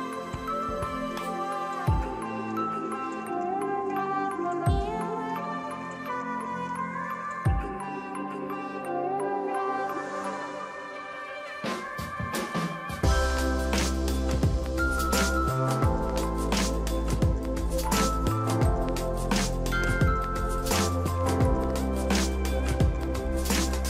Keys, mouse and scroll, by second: 0.4 ctrl+t, 6.7-7.9 scroll down 1, 10.0 shift+click, 11.9 ctrl+a, 13.0 ctrl+d, 13.1 ctrl+d, 13.3 ctrl+t, 13.4 ctrl+t, 13.7 alt+click, 13.8 alt+click, 16.8 ctrl+j, 17.6 right click, 18.6 double click, 21.4 ctrl+t.